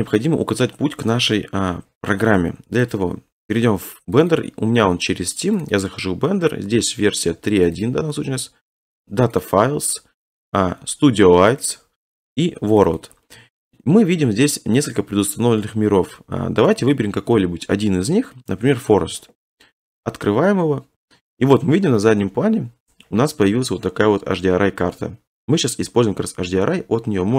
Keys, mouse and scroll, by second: 2.9 click, 4.2 click, 4.4 click, 5.6 click, 5.8 click, 7.7 click, 7.8 click, 9.3 click, 9.5 click, 11.7 click, 12.8 click, 12.9 click, 19.0 click, 19.9 click, 22.4-23.1 scroll, 23.1-24.8 scroll, 24.8-25.6 scroll.